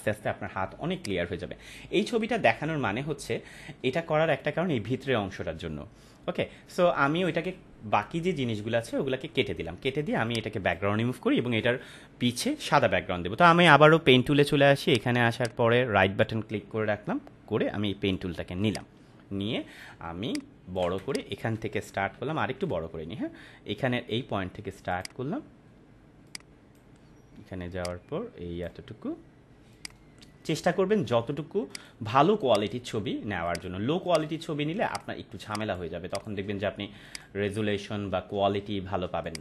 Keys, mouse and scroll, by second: 0.9 click, 3.1 ctrl+=, 6.7 space, 8.1 ctrl+-, 10.1 space, 10.3 click, 10.5-10.9 space, 14.9 click, 15.3-18.4 right drag, 18.5 click, 19.6 space, 20.3-20.9 ctrl+click, 20.9 space, 21.1 click, 21.4 space, 21.9 =, 22.1 =, 22.7 ctrl+=, 24.9-26.8 drag.